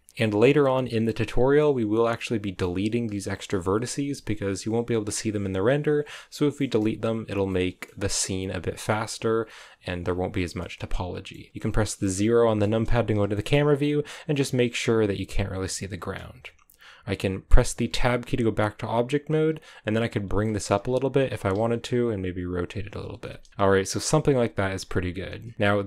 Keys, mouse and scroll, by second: 2.1 middle click, 2.9 right click, 3.0 g, 3.9 right click, 4.1 g, 5.7 g, 6.3 right click, 6.5 middle click, 6.9 g, 7.2 scroll down 2, 7.4 middle click, 7.9-8.6 scroll up 3, 8.6 right click, 8.8 g, 10.5 middle click, 11.4 g, 12.4 KP_0, 13.2 shift+middle click, 13.5-15.0 scroll down 3, 15.0-15.5 scroll up 1, 15.5 right click, 15.6 g, 17.7 Tab, 19.3 g, 20.3 shift+middle click, 21.2 r, 22.9 g, 23.5 a.